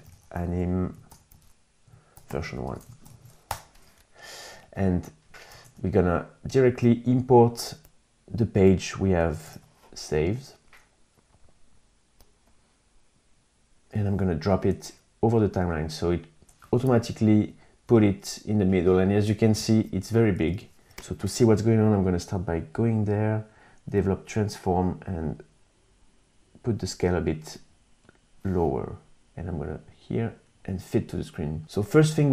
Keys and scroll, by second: 0.0-2.3 typing, 2.8 Return, 5.0 super+Tab, 8.8 super+Tab, 16.6 super+-, 19.8 super+=.